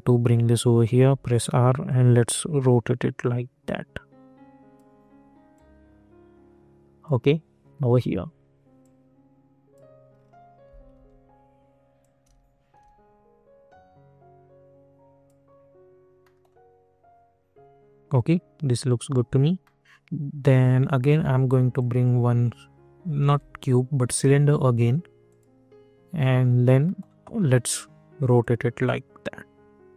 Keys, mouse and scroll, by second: 0.9 r, 1.8-7.8 drag, 7.8 e, 8.8-10.1 drag, 10.1 scroll up 1, 10.9 r, 11.9-16.2 drag, 16.2 middle click, 19.6 middle click, 23.0 click, 23.2 ctrl+z, 24.0 click, 26.2 middle click, 27.3-28.3 scroll down 1, 28.3-29.9 drag.